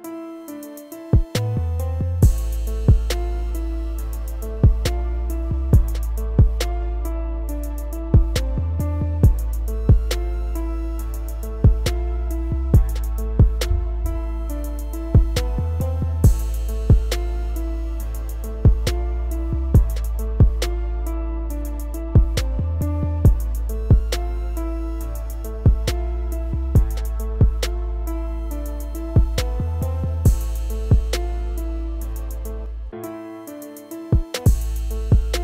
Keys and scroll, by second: 0.5 ctrl+s, 18.4 ctrl+s, 32.2 ctrl+z.